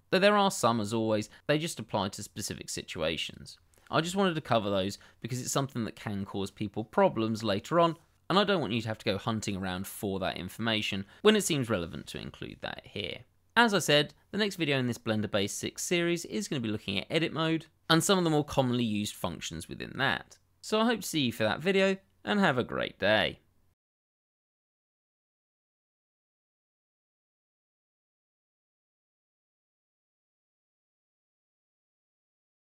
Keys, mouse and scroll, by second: 3.2 click.